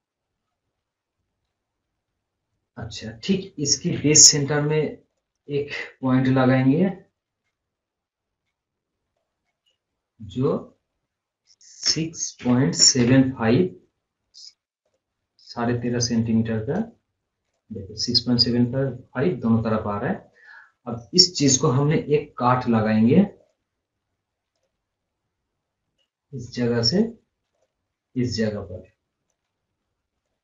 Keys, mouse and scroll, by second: 0.2 scroll up 1, 0.4 scroll down 1, 1.5 scroll up 1, 4.3 o, 5.2 click, 9.2-12.0 drag, 14.9 click, 16.7 right click, 17.5 click, 19.1 scroll up 1, 19.7-20.0 scroll down 1, 23.5 click, 29.8 right click, 30.3 click.